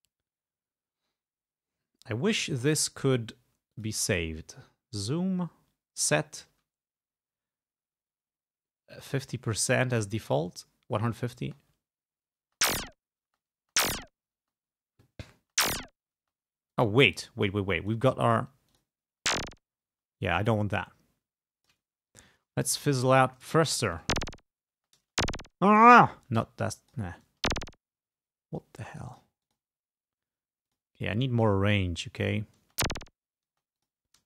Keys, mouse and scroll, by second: 2.7 click, 3.8 click, 10.0 click, 11.5 space, 12.5 space, 13.4 space, 14.5 space, 15.5 space, 16.3 space, 16.8 click, 17.6 click, 18.8 click, 19.2 space, 20.4-22.0 drag, 22.9 click, 24.0 space, 24.9 space, 26.5 click, 27.4 space, 29.2 click, 29.5 click, 30.8 click, 31.5-32.6 drag, 32.7-34.2 typing, 33.9 click.